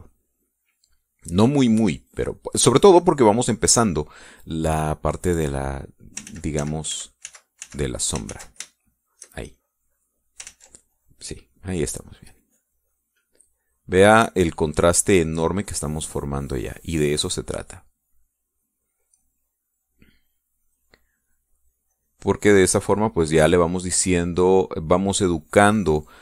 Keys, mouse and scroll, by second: 0.7 click, 1.9 click, 3.1 middle click, 3.7 middle click, 6.4 click, 7.3 ctrl+z, 9.4 ctrl+shift+z, 9.8 ctrl+shift+click, 10.6 shift+click, 11.5 ctrl+z, 12.0-13.1 ctrl+drag, 15.0 click, 15.8-23.6 drag.